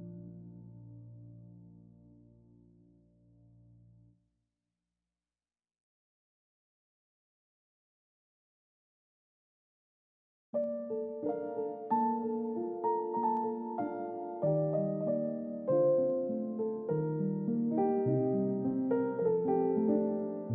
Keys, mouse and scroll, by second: 11.6-11.9 scroll down 1, 11.9 middle click, 14.3-14.8 scroll up 1, 14.8 middle click, 18.6 typing.